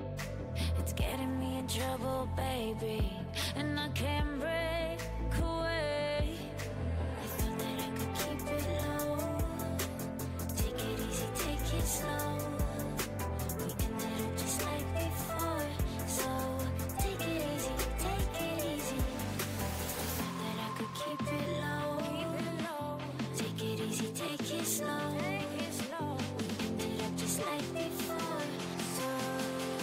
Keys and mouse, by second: 0.8 Tab, 3.3 click, 6.8 v, 20.0 z, 20.8 z, 23.0 l, 23.9 l, 24.7 x, 27.2 click, 28.5 middle click, 29.1 Tab.